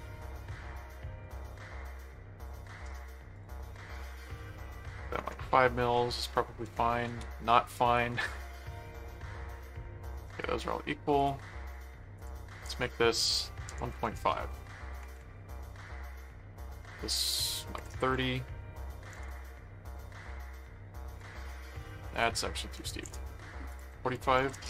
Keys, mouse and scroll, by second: 0.7 alt+q, 1.2 click, 1.4 right click, 2.4 click, 3.3 click, 7.0 ctrl+z, 7.7 right click, 8.8 ctrl+click, 10.2 ctrl+click, 10.4 ctrl+right click, 11.1 click, 12.2 click, 16.0 right click, 16.6 click, 17.3 click, 21.1 click, 22.1 click, 23.7 click.